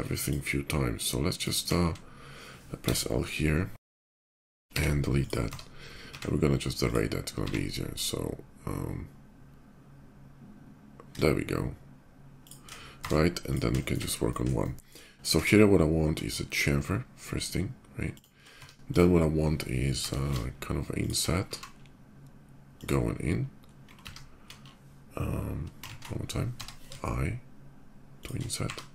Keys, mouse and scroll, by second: 0.0 shift+click, 1.4 x, 2.4 l, 4.1 l, 4.5 x, 5.0 click, 5.2 Tab, 5.7 q, 6.5 click, 7.1 x, 12.2 shift+click, 12.7 Tab, 13.1 click, 13.5 shift+middle click, 14.3 shift+middle click, 15.2 ctrl+b, 16.9 shift+middle click, 17.9 shift+click, 18.2 Tab, 18.6 click, 19.7 t, 20.8 shift+click, 21.1 e, 22.5 click, 25.6 ctrl+z, 26.3 c, 26.4 i, 28.0 click, 28.4 e.